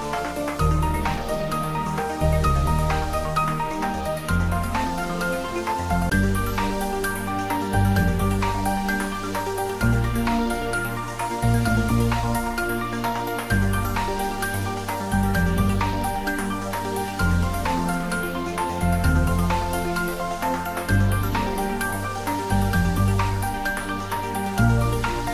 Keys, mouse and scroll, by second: 0.0 alt+h, 11.8 ctrl+s, 13.7-15.0 scroll down 1, 15.0 click, 16.1-17.0 scroll down 1, 17.6-20.7 middle drag, 20.7-21.4 scroll down 1, 21.4-23.1 middle drag, 23.1-23.4 scroll up 1, 24.7 click.